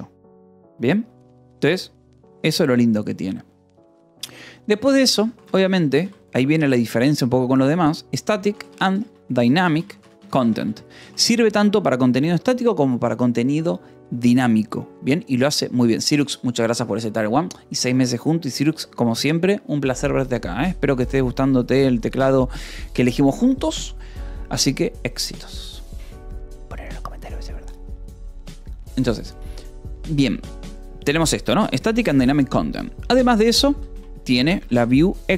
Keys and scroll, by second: 5.4 t, 5.7 c, 5.9 space, 8.3-10.0 typing, 10.5 Escape, 11.5 ctrl+s, 18.9 :, 19.1 space, 23.2 space, 33.6-35.3 typing.